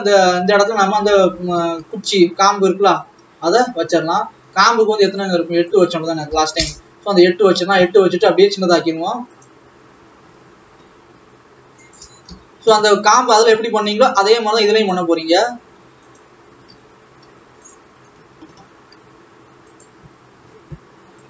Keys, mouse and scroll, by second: 1.0 ctrl+s, 3.0 shift+a, 3.5-6.6 scroll down 9, 6.6-8.3 drag, 8.3 s, 9.6-11.2 scroll up 6, 11.2 s, 12.2 KP_3, 12.7-13.2 scroll up 1, 13.2-13.5 scroll down 3, 13.9 g, 16.6 s, 18.2-18.9 scroll up 4, 19.0 s, 20.2-20.9 scroll up 3.